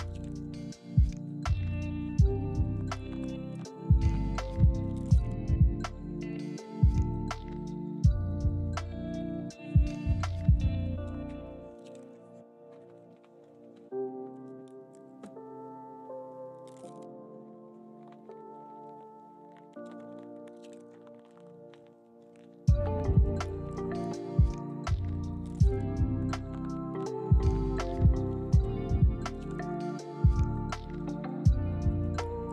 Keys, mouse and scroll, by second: 0.2 ctrl+click, 0.9 f, 1.3 shift+click, 1.5 middle click, 1.9 KP_1, 2.5 e, 3.3 scroll up 1, 3.5 shift+middle click, 3.6-4.1 shift+scroll down 1, 4.1 z, 5.3 r, 5.9 ctrl+click, 6.3 r, 6.9 ctrl+click, 7.5 shift+click, 8.0 right click, 9.2 middle click, 12.6 middle click, 16.2 middle click, 17.8 middle click, 31.5 scroll up 1, 31.7 shift+middle click, 31.9 shift+middle click.